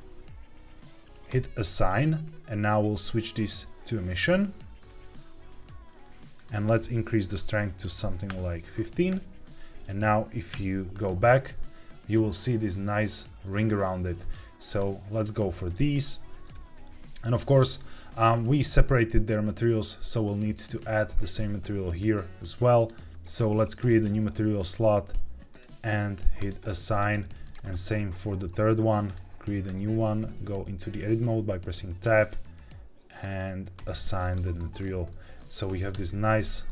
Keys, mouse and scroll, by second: 1.2 click, 2.8-4.1 drag, 6.3-8.2 drag, 9.1 Tab, 14.1 click, 14.6 click, 16.5 Tab, 17.3 middle click, 17.8-18.5 scroll up 4, 21.8 click, 22.7 click, 23.1 ctrl+z, 23.7 click, 24.6-25.6 drag, 26.3 click, 27.1 Tab, 27.3 click, 27.5 click, 29.0 click, 29.6 Tab, 32.1-33.2 drag, 33.7 click, 34.3 Tab, 34.6 scroll down 2, 35.0 middle click, 35.8 KP_0.